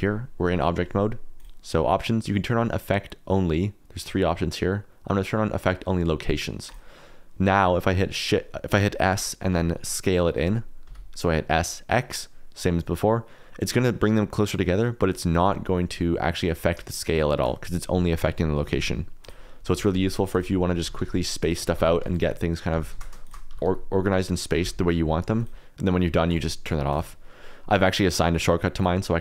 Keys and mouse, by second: 1.3-6.9 drag, 7.7 middle click, 9.5 s, 10.8 x, 15.1 click, 15.9 middle click, 16.8 shift+middle click, 18.5 s, 18.7 x, 19.4 click, 19.7-24.6 typing, 20.3 click, 20.5 middle click, 23.2 shift+click, 26.2 click, 28.7 click.